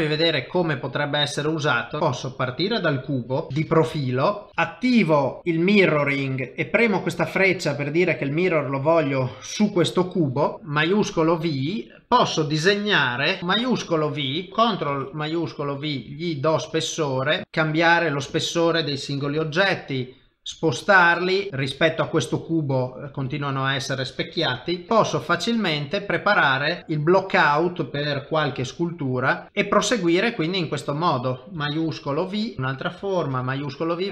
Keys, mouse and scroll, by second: 0.1 click, 2.0 middle click, 3.5 KP_7, 3.5 KP_1, 3.5 KP_3, 4.0 shift+middle click, 4.5 ctrl+alt+shift+v, 13.4 click, 13.9 shift+v, 14.3 middle click, 14.9 ctrl+shift+v, 16.7 middle click, 17.4 click, 18.3 click, 19.4 g, 21.5 middle click, 21.5 click, 23.3 click, 23.5 middle click, 24.7 r, 24.9 r, 25.7 middle click, 26.8 s, 27.2 middle click, 28.6 g, 29.4 middle click, 29.5 ctrl+middle click, 32.1 shift+v, 32.4 click, 33.4 shift+v, 33.8 middle click.